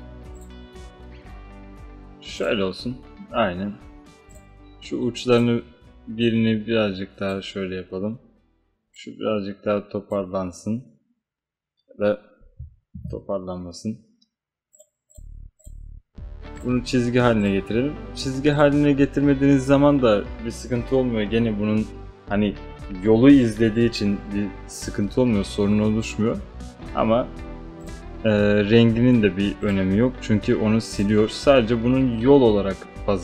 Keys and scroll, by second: 13.0 ctrl+z.